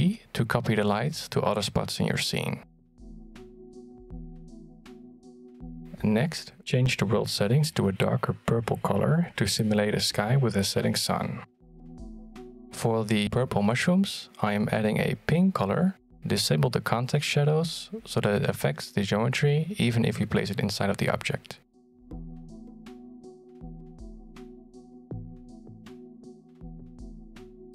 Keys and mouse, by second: 0.0 shift+d, 1.3-1.9 middle drag, 2.0 g, 3.5-4.5 middle drag, 4.6 g, 6.2 click, 16.1 click, 17.2 click, 19.8-21.8 drag, 22.7 click, 23.0 1, 23.8 middle click, 24.5 g, 25.0 middle click, 25.4 shift+middle click, 25.8 shift+d.